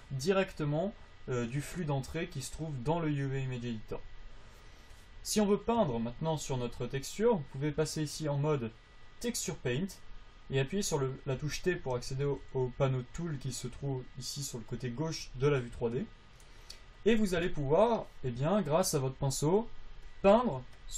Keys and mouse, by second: 9.8-11.6 drag, 11.7 t, 12.2 t, 12.6 t, 19.5-20.9 drag.